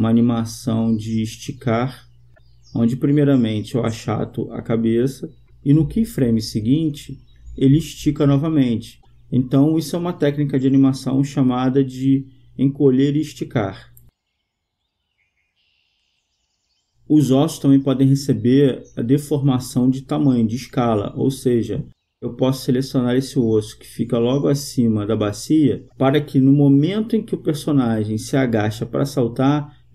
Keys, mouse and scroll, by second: 1.0-2.7 drag, 3.3-5.1 drag, 5.8-7.3 drag, 7.9-12.5 drag, 18.0-21.4 drag, 21.8-23.4 right drag, 26.0-27.8 drag, 28.5-29.9 drag.